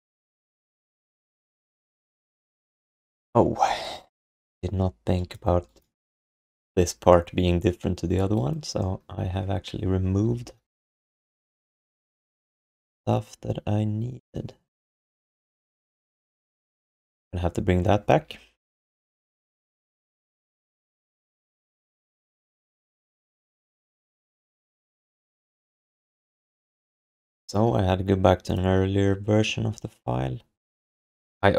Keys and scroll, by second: 18.2 ctrl+s, 20.2 alt+shift+r, 24.8 ctrl+alt+r.